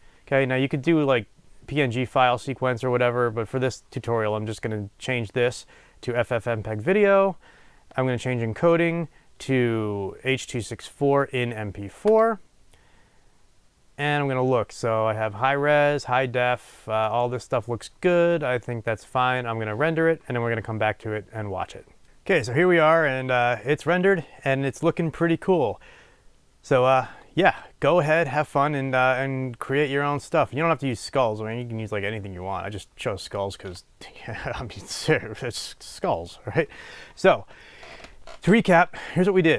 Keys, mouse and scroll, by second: 0.0-39.5 drag.